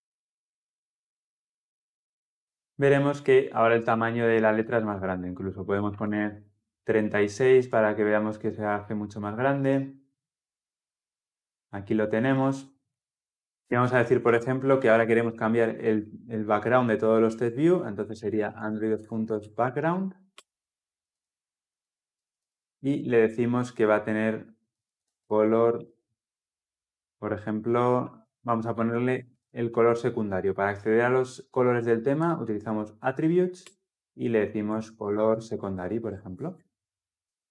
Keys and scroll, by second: 7.6 ctrl+F10, 13.2 ctrl+F10, 16.0 Return, 20.2 Return, 33.5 Return, 34.6 Return.